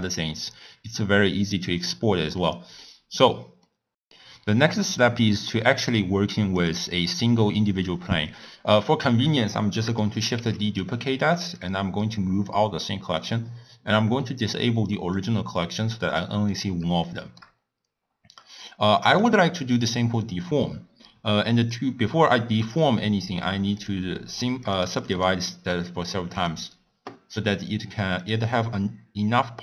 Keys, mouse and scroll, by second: 2.4 middle click, 3.0 scroll down 1, 3.1-3.7 scroll up 1, 3.7 middle click, 3.8-5.2 drag, 5.2-6.0 scroll up 2, 6.0-6.6 middle drag, 6.6 click, 6.9-7.9 scroll up 5, 10.3 shift+d, 12.4 click, 15.1 click, 15.8 click, 17.1 shift+middle click, 17.6-19.6 scroll up 1, 22.6 click, 23.7 click, 24.7-27.2 drag, 27.2-28.1 scroll up 1.